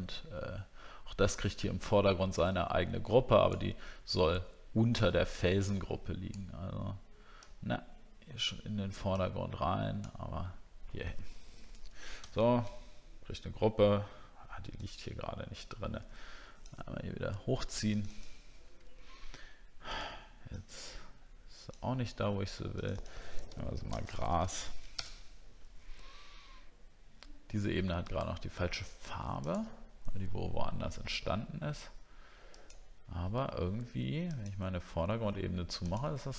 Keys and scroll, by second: 23.4 ctrl+g.